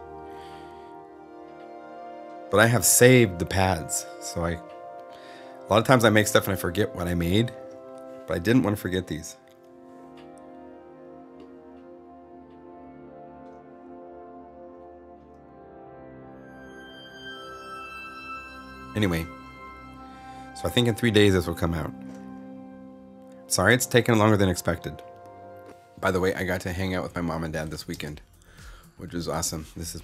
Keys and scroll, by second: 27.8 space.